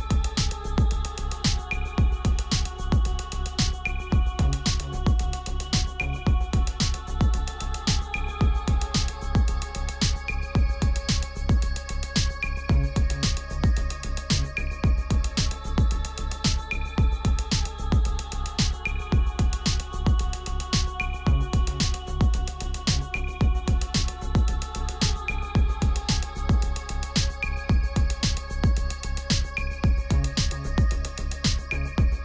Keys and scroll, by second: 12.3 ctrl+g.